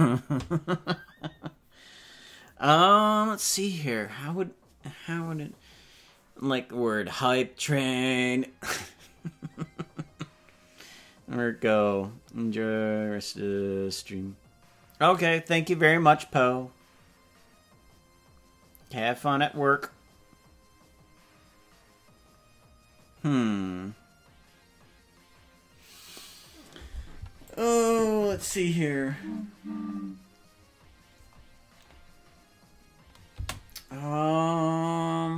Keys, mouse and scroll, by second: 27.5 click, 28.2 space, 33.3 space.